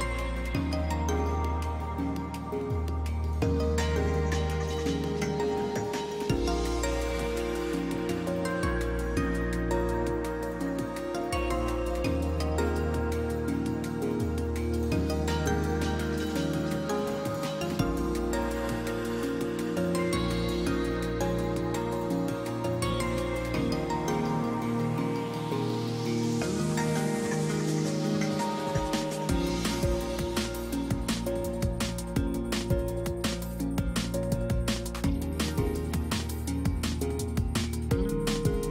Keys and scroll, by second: 8.3 space, 12.2 space, 25.6 space, 26.9 space, 28.6 ctrl+space.